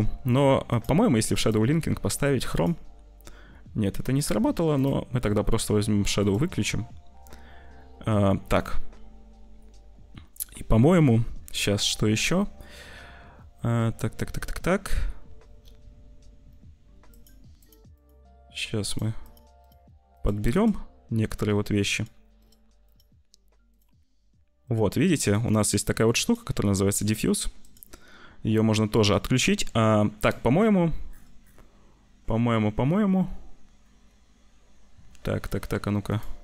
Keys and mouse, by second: 0.7 click, 1.4-2.6 drag, 4.1 click, 4.8 click, 6.1 click, 17.0 click, 17.5 click, 18.8 click, 19.3 click, 19.5 click, 20.5 click, 21.8 click, 22.3 click, 22.8 click, 23.6 click, 24.6 click, 25.1 click, 27.0 click, 27.5 click, 36.0 click.